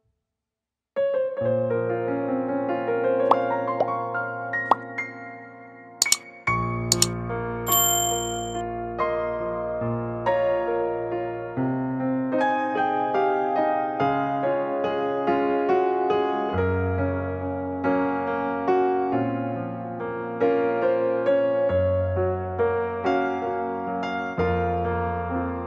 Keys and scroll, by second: 2.3 e, 2.8 space, 6.6 ctrl+s, 21.5 ctrl+z.